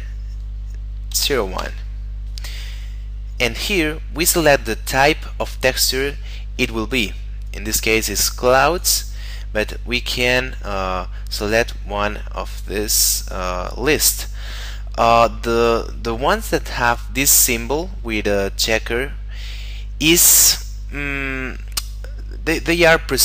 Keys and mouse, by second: 1.1 0, 1.2 1, 1.5 Return, 8.7 click.